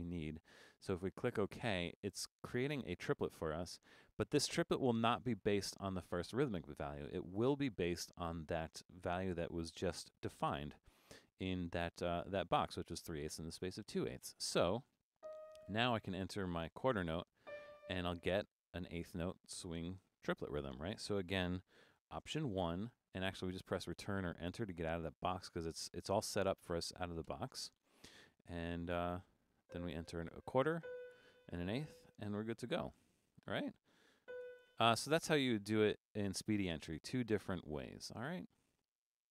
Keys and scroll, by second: 15.7-17.6 typing, 22.5 alt+1, 30.1-31.1 typing, 33.6-34.9 typing.